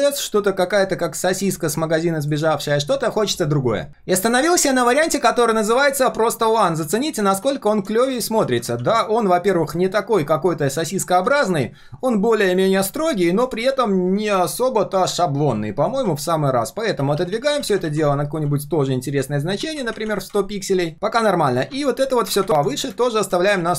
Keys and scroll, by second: 4.2 ctrl+alt+v, 6.2 ctrl+z, 6.8 ctrl+shift+z, 7.4 ctrl+z, 8.7 ctrl+z, 11.3 ctrl+shift+z, 23.6 ctrl+s.